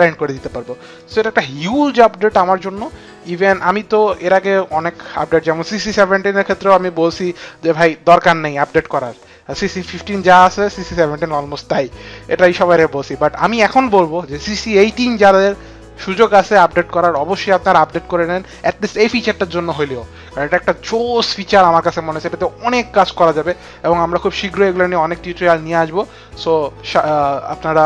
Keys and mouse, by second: 0.8 click.